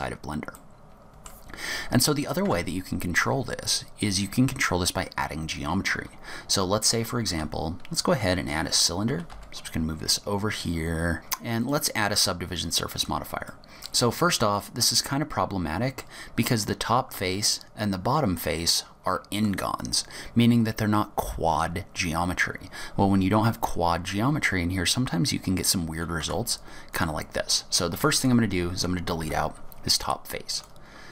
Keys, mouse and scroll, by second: 0.7 middle click, 2.5 Tab, 7.4 shift+a, 9.2 g, 11.1 middle click, 11.1-11.7 scroll down 3, 11.7 click, 13.6 middle click, 14.4 scroll up 3, 15.1 middle click, 17.3 middle click, 26.3 Tab, 27.0 click, 28.1 3, 28.3 click, 29.3 Delete.